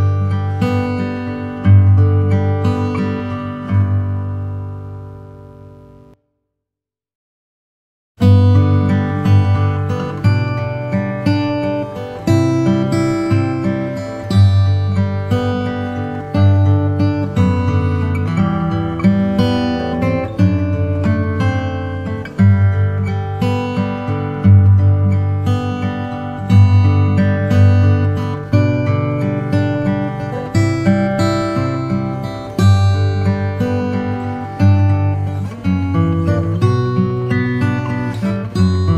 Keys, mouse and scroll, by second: 0.0 Tab, 0.0 middle click, 1.3 Tab, 1.8-3.1 middle drag, 3.1 Tab, 4.0 Tab, 5.7 ctrl+r, 6.3 ctrl+r, 9.5 Tab, 9.5 Tab, 10.2-12.3 middle drag, 11.0 Tab, 11.7 ctrl+r, 13.4 Tab, 13.6 click, 13.6-14.8 middle drag, 13.8 right click, 22.8-27.1 middle drag, 30.9-31.2 scroll down 1, 31.2-32.4 middle drag, 32.4 Tab, 32.8 Tab, 33.0 middle click, 34.6-36.3 middle drag, 36.9-38.9 drag.